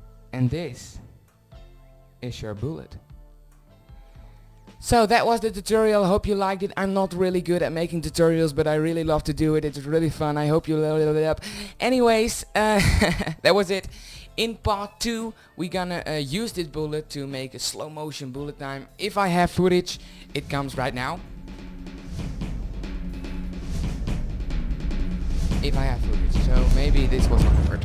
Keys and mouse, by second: 1.0-1.4 middle drag.